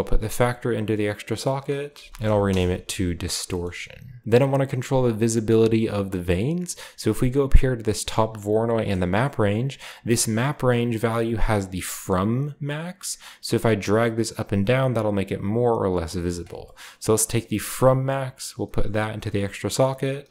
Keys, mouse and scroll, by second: 0.2-1.5 drag, 1.6 click, 2.1-2.9 typing, 4.2-7.1 scroll up 2, 8.7 click, 13.0 shift+click, 16.2 shift+middle click, 16.5-17.4 scroll down 2, 17.4-19.2 scroll down 1, 19.6-20.3 drag, 20.2-20.3 typing.